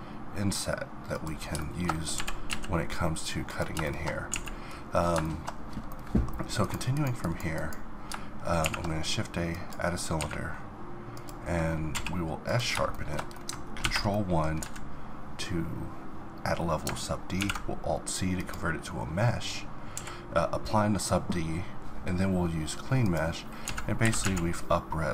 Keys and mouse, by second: 1.6 middle click, 2.1 g, 3.1-4.3 middle drag, 4.3 a, 4.6 middle click, 5.3-8.6 middle drag, 8.6 shift+a, 10.2 s, 11.9 q, 12.9 middle click, 13.8 ctrl+1, 14.6 z, 15.6-17.4 middle drag, 17.4 alt+c, 18.4-19.9 middle drag, 19.9 q, 23.7 z, 24.0 s.